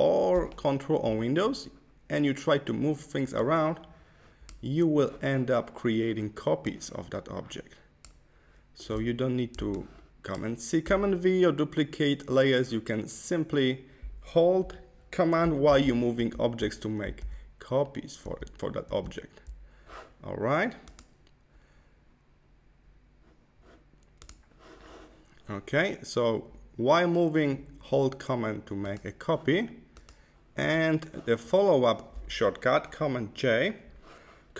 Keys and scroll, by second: 15.6 super+z, 17.2 super+z, 18.1 super+z, 18.8 super+z.